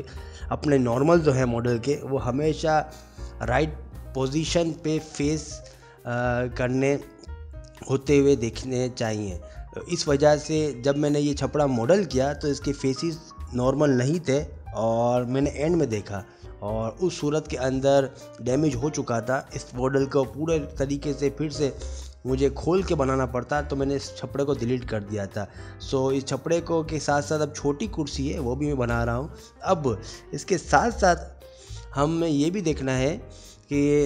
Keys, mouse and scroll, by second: 0.0 ctrl+r, 0.3 2, 0.4 click, 0.4 middle click, 0.5 g, 0.9 click, 1.0 click, 1.0 g, 2.6 middle click, 2.7 g, 3.1 middle click, 4.3 middle click, 4.6 2, 4.8 shift+click, 5.0 f, 5.4 i, 6.6 middle click, 7.0 click, 7.1 g, 7.5 click, 8.0 middle click, 8.5 ctrl+r, 8.8 middle click, 9.4 k, 10.3 middle click, 11.4 middle click, 11.7 ctrl+r, 11.9 middle click, 12.2 ctrl+r, 12.5 middle click, 12.7 k, 13.6 middle click, 14.1 click, 14.2 shift+click, 14.3 middle click, 14.5 shift+click, 14.7 shift+click, 14.7 middle click, 14.8 s, 15.8 middle click, 16.6 shift+middle click, 18.5 middle click, 18.9 shift+middle click, 19.4 shift+middle click, 19.4 click, 19.6 3, 19.8 click, 20.1 alt+click, 20.4 middle click, 20.4 i, 20.9 middle click, 21.1 Tab, 21.2 q, 21.6 ctrl+a, 22.1 Tab, 22.5 i, 22.7 g, 23.6 middle click, 23.8 e, 24.1 middle click, 24.2 s, 24.6 ctrl+z, 24.6 middle click, 24.9 click, 25.2 s, 25.4 middle click, 26.0 middle click, 26.8 Tab, 26.8 middle click, 27.2 ctrl+s, 28.6 middle click, 28.9 shift+right click, 29.0 shift+a, 30.0 click, 31.9 click, 32.1 click, 32.2 g, 32.6 middle click, 32.8 middle click, 33.3 middle click.